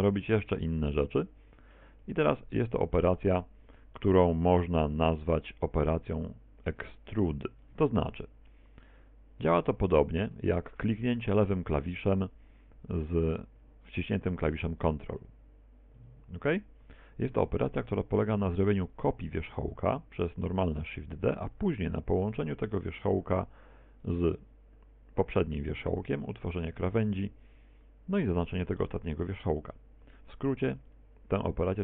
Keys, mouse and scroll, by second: 0.4 shift+c, 1.3 shift+middle click, 2.3 shift+a, 7.7 Tab, 8.1 middle click, 9.9 right click, 10.6 shift+middle click, 16.0 ctrl+click, 18.8 right click, 19.9 shift+d, 21.7 click, 22.3 shift+right click, 23.3 f, 24.1 right click, 30.9 ctrl+click.